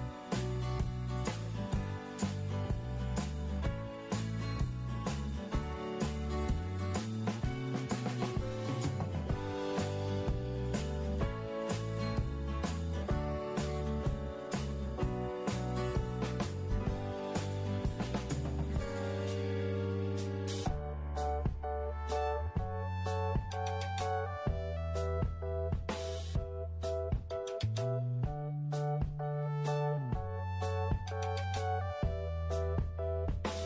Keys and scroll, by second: 0.4 alt+space, 32.8-33.6 typing.